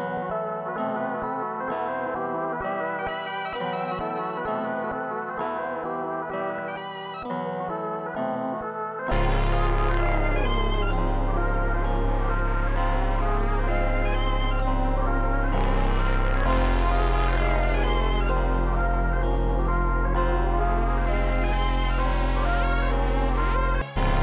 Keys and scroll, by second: 7.7 super+s, 22.7 super+s, 23.7 space.